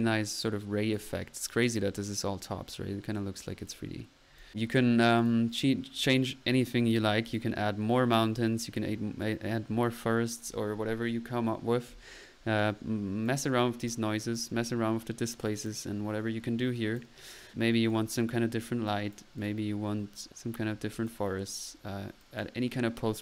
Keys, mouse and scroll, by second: 4.2 middle click, 4.4 click, 4.8 middle click, 5.2 click, 5.6 right click, 7.3-7.6 right drag, 12.6-13.3 drag, 13.8 right drag, 14.1 middle click, 14.4 click, 15.7 click, 16.8 click, 17.9 click, 18.4 right click, 18.5 middle click, 18.9-19.9 drag, 20.0 middle click, 20.9-21.3 drag, 21.8-22.3 middle drag, 22.3 click, 22.7 click.